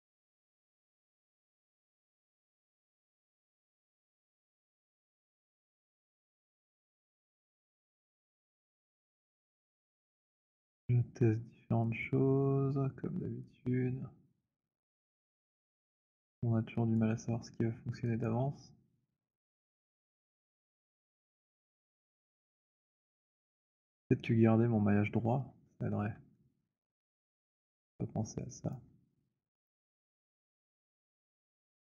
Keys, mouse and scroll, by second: 0.0-2.4 typing, 2.4 middle click, 4.5 alt+right click, 5.5 click, 7.3 alt+middle click, 10.8 click, 12.0 click, 17.0 click, 18.1 click, 22.3 click, 23.6 alt+middle click, 26.6 alt+middle click, 28.8 alt+click, 29.8 click.